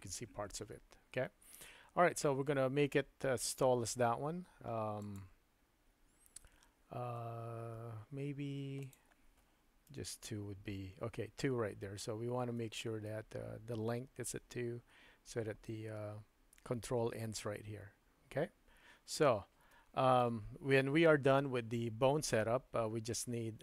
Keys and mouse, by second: 9.0-11.6 drag, 12.6 shift+middle click, 19.8 shift+middle click.